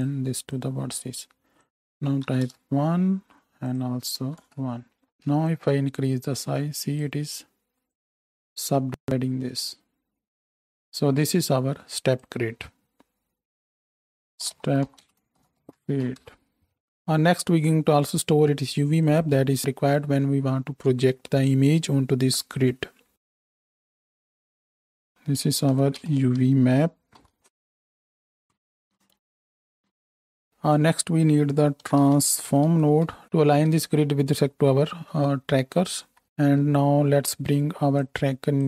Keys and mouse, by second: 13.7 ctrl+j, 14.2 shift+F2, 19.1-27.2 drag, 23.0 shift+a, 23.1 shift+a, 23.9-28.8 middle drag, 23.9-27.2 right drag, 28.8 click, 29.1 x, 29.2 alt+shift+middle click, 29.3 click, 29.4 x, 29.5 middle click, 30.5 BackSpace, 33.2-35.2 drag, 35.7 alt+shift+middle click, 36.2-38.6 middle drag.